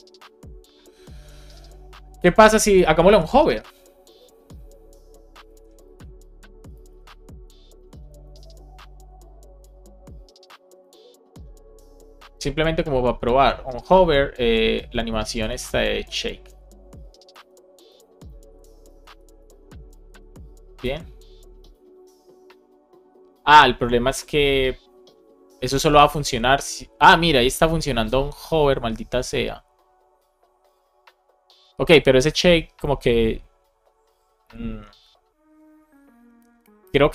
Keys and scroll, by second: 5.4 super+c, 6.5 Return, 6.8 super+v, 7.2 Up, 8.5 super+Right, 8.8 Left, 9.5 shift+;, 15.4 super+c, 17.3 super+v, 18.4 super+Right, 18.9 shift+super+Left, 19.3 BackSpace, 20.7 super+s.